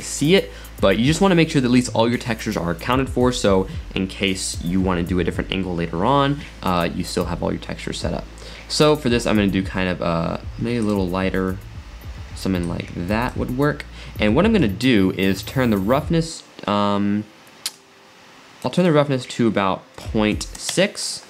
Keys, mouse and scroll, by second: 6.8-8.3 middle drag, 8.3 scroll up 1, 8.9 click, 14.3-17.3 middle drag, 17.7-20.8 drag.